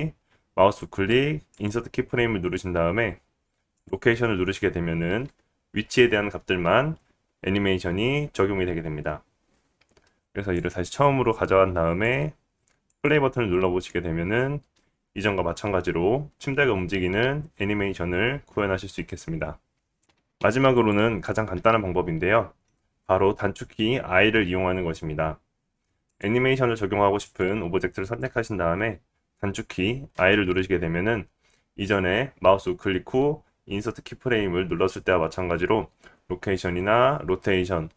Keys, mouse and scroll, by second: 10.5-19.7 drag, 10.5-19.7 middle drag, 19.7 space, 20.0-23.4 right drag, 20.0 a, 20.3 x, 23.4-27.4 drag, 26.0 middle click, 26.0 right click, 27.2 middle click, 27.2-33.2 right drag, 30.1 i.